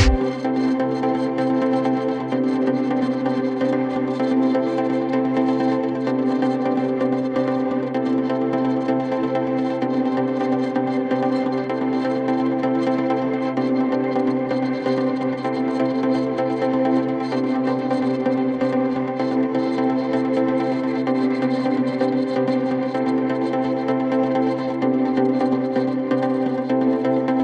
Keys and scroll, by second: 0.0-1.7 typing, 22.1 shift+F2, 22.4 F3.